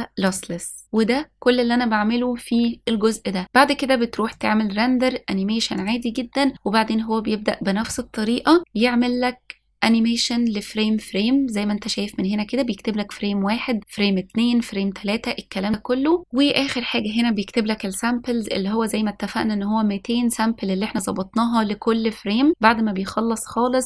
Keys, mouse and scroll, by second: 0.8-3.4 scroll down 2, 5.1-6.6 drag.